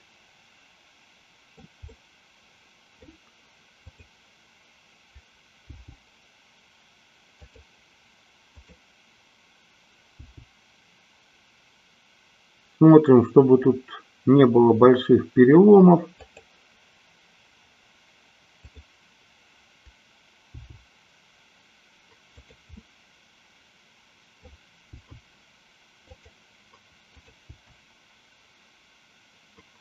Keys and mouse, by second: 2.0-3.2 middle drag, 3.9 click, 5.8 g, 10.2 g, 18.5-19.7 drag, 20.7 g, 22.5 click, 22.8-24.7 middle drag, 25.0 g, 27.2-28.5 drag, 28.7 g.